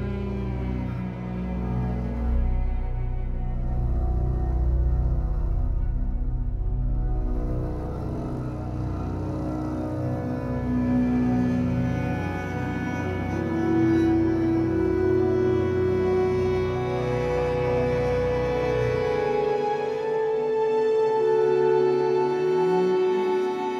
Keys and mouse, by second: 0.0 click, 0.9 click, 2.5-3.7 typing, 4.0 Return, 5.5 space, 11.0 space, 12.2 ctrl+alt+click, 12.9 click, 13.9 drag, 15.0 click, 16.1 s, 16.3 z, 17.4 click, 18.1 space, 21.7 space.